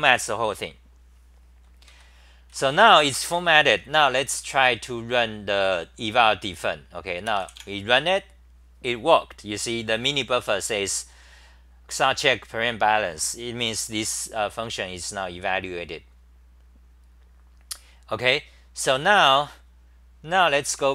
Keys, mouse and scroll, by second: 1.9 ctrl+g, 2.5 c, 2.7 c, 4.0-5.2 typing, 7.6 typing, 16.1-16.9 typing, 16.5-17.0 scroll down 13, 20.8 ctrl+shift+Tab.